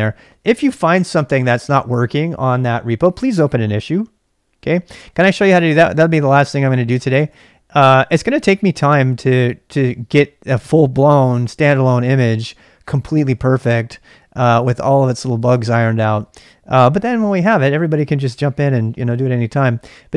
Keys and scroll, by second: 5.4 super+Tab, 6.3 super+Tab, 7.2 super+Tab, 7.3 super+Tab, 19.8-20.1 typing.